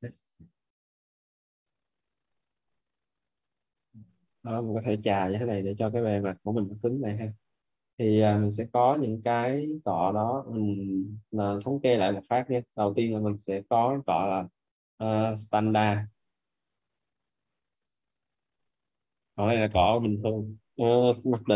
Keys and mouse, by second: 1.7 click, 7.3 alt+right click, 7.8 alt+right click, 8.3 alt+right click, 9.4 alt+right click, 9.8 right click, 10.4 alt+right click, 12.1 alt+right click, 13.6 alt+`.